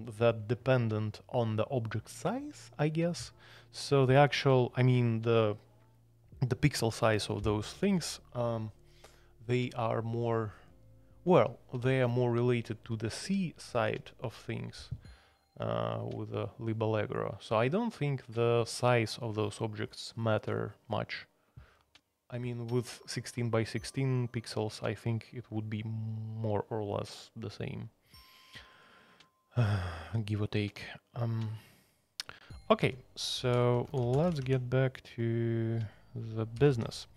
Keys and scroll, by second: 32.8 Escape, 33.1-34.9 typing, 36.5 ctrl+c, 36.7 ctrl+c.